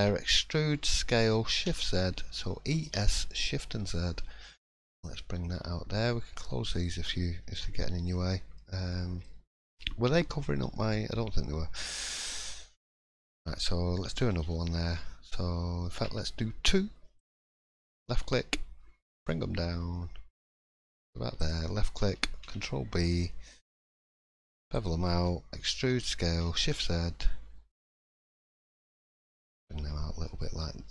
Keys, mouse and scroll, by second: 6.7 click, 8.0 middle click, 8.9 shift+middle click, 9.2-9.8 scroll up 2, 11.7 middle click, 12.4 click, 12.8 shift+middle click, 14.3 ctrl+r, 22.4 ctrl+b, 29.4 click, 29.6-30.1 scroll down 1, 30.2 middle click, 30.2 scroll down 2, 30.8 3.